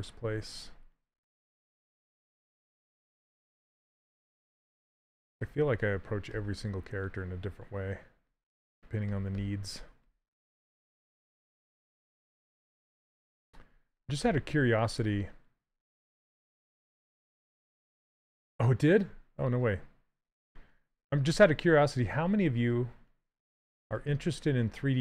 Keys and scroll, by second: 3.1 s, 21.7 s.